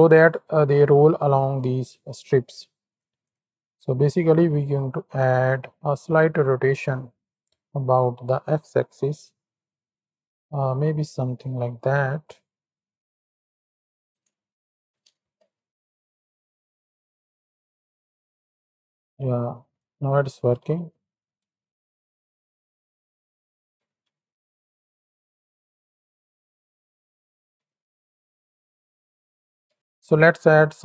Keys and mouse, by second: 3.2 click, 5.6-11.5 shift+drag, 12.9-13.5 shift+drag, 14.7 shift+Right, 14.8 shift+Left, 15.1 space, 19.4 click, 20.5 shift+Right, 21.0 shift+Left, 21.6 z, 21.9 click, 24.1 shift+Left, 27.4 shift+Left.